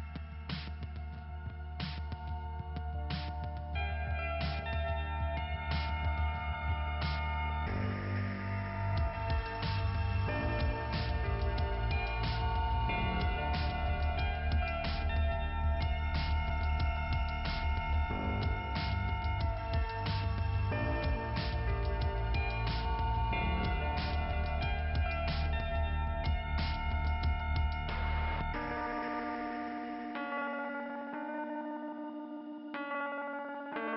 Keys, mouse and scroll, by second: 0.0 click, 1.2 click, 1.8 click, 2.5 click, 4.9 click, 5.8 click, 5.9 click, 6.3 scroll down 1, 6.9 click, 12.2 middle click, 13.9 click, 32.6-33.3 scroll up 1.